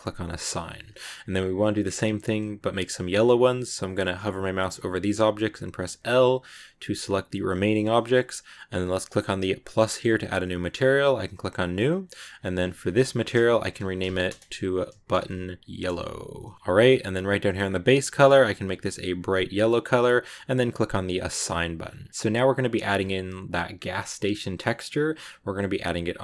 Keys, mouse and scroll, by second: 1.1 a, 5.6 l, 9.4-11.9 drag, 12.0-13.7 drag, 13.7 t, 15.9 BackSpace, 16.5 l, 17.4 click, 20.6 click, 21.2 Tab, 21.3 scroll down 2, 21.8 a, 22.0 middle click, 22.2 middle click, 22.8 scroll up 2, 24.5-26.2 middle drag.